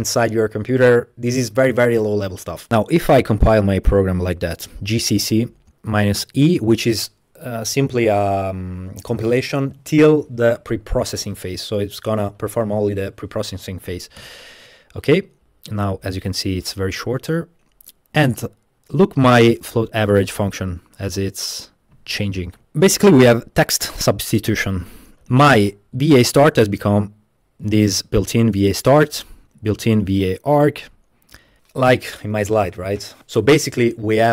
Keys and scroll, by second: 3.2-4.5 typing, 14.3 Return, 22.6 super++.